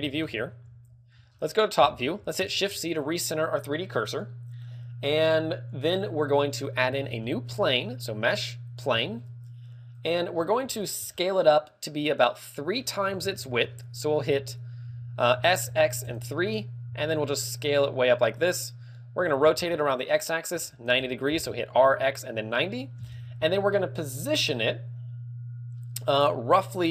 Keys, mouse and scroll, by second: 0.0 Escape, 0.3 KP_7, 0.7 Escape, 0.7 click, 0.7 KP_7, 1.3 scroll down 4, 1.9 KP_5, 3.1 scroll down 1, 3.1 KP_5, 3.1 shift+c, 6.5 click, 7.1 shift+a, 12.5 click, 12.8-13.9 scroll up 8, 13.4 shift+middle click, 14.5 z, 14.7-15.3 scroll up 3, 15.4 s, 17.4 s, 17.6 s, 18.3 click, 18.5-18.9 scroll down 5, 19.7 click, 19.7 scroll down 1, 19.7 r, 21.8 KP_1, 22.2 KP_1, 23.0 KP_7, 23.1 KP_7.